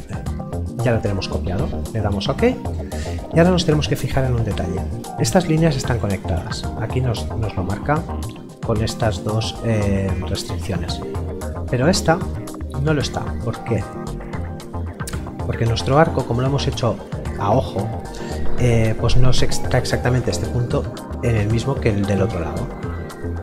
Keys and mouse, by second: 1.8 click, 5.9 click, 11.7 click.